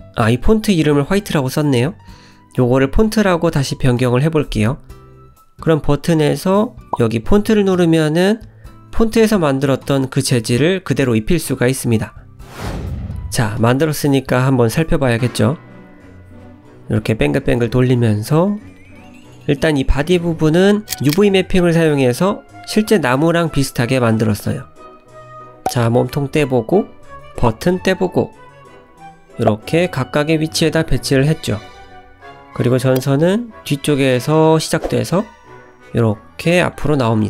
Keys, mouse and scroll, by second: 1.0 click, 5.4 click, 7.4 click, 7.8-9.5 scroll up 7, 9.1 shift+middle click, 9.9 click, 10.2 middle click, 11.5 scroll up 1, 11.7-12.3 scroll down 8, 12.3 click, 12.6 shift+middle click, 19.3 middle click, 20.2 scroll up 1, 21.0 scroll up 3, 21.4 shift+middle click, 22.1 middle click, 23.3 click, 24.1-24.4 scroll down 2, 24.7 middle click, 25.6 g, 26.5 ctrl+z, 27.1 click, 27.4 g, 28.5 ctrl+z, 29.1 click, 29.3 g, 30.6 ctrl+z, 32.6 click, 32.9 g, 34.1 ctrl+z, 34.4 click, 34.6 middle click, 36.7-37.2 scroll down 2, 37.1 middle click.